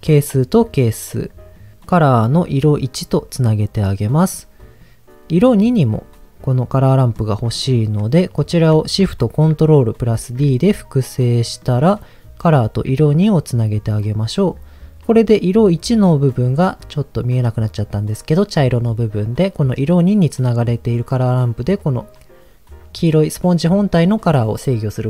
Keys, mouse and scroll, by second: 0.0-1.3 drag, 1.5 middle click, 1.8 click, 2.8 click, 3.7 click, 4.3 click, 6.1-6.9 scroll up 1, 6.9 middle click, 6.9 scroll up 1, 7.4 click, 10.1 ctrl+shift+d, 11.2 click, 11.6 middle click, 12.4-13.6 drag, 14.0 click.